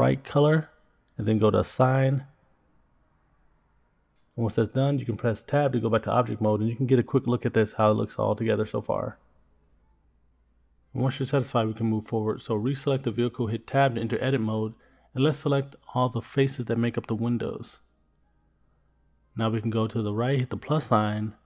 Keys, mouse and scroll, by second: 4.0 click, 7.6 Tab, 8.5 click, 9.0-9.4 scroll down 2, 9.7-12.1 middle drag, 12.6 click, 13.2 Tab, 14.1 scroll up 2, 15.7 click, 16.2 shift+click, 16.4 middle click, 16.8 shift+click, 17.0 middle click, 17.3 shift+click, 17.6 shift+click, 17.8 middle click, 18.1 shift+click, 18.3 middle click, 21.2 click.